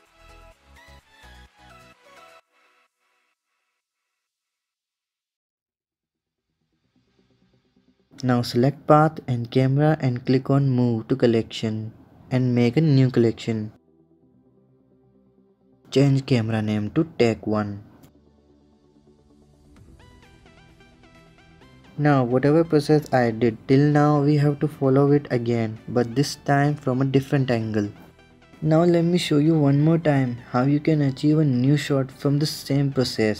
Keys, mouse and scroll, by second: 0.2 click, 3.7 click, 6.6 KP_0, 7.0-8.4 middle drag, 8.4 shift+click, 9.7-11.7 drag, 14.9 click, 15.1 click, 16.1 click, 16.7-19.8 drag, 23.4-25.4 middle drag, 32.9-33.3 middle drag.